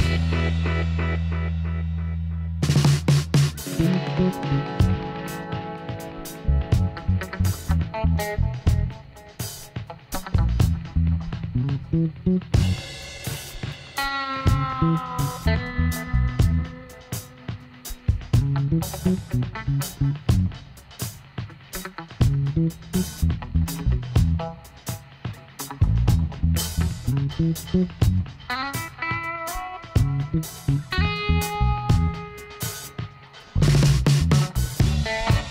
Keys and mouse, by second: 0.5 g, 3.1 e, 5.8 e, 8.2-10.2 drag, 9.0 g, 12.2 right click, 12.7-15.7 middle drag, 14.1 e, 16.3 e, 18.0 e, 19.8 e, 22.0-23.7 drag, 22.8 b, 24.0 g, 25.1-26.4 drag, 30.3 Tab, 30.7 z, 33.0 middle click, 34.0 middle click, 34.2 Tab, 34.5 middle click, 34.5 a, 34.9 a.